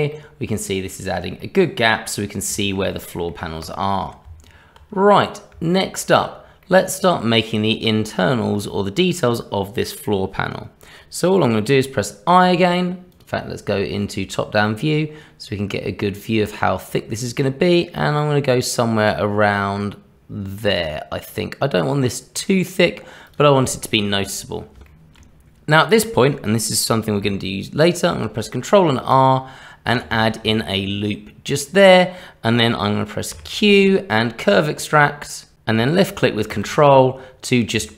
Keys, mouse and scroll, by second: 0.1 middle click, 1.0-1.4 scroll down 1, 1.4 middle click, 2.3 scroll down 1, 2.6 shift+middle click, 2.9 middle click, 3.6 click, 4.2 Tab, 5.7 shift+middle click, 6.6 middle click, 13.1 click, 14.5 i, 24.8 shift+middle click, 28.1 ctrl+r, 31.1 middle click, 33.3 q, 37.7 Tab.